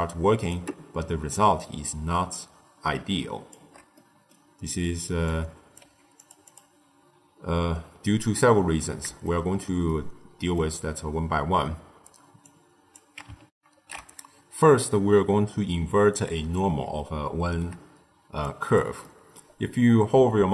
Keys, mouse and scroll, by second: 3.8 middle click, 4.4-5.2 scroll down 2, 5.2 click, 5.8 g, 6.4 click, 9.1-12.3 shift+middle drag, 12.3 click, 13.4 ctrl+alt+shift+w, 16.8-18.3 shift+middle drag, 18.3 click, 18.9 middle click, 19.3-20.5 scroll up 1.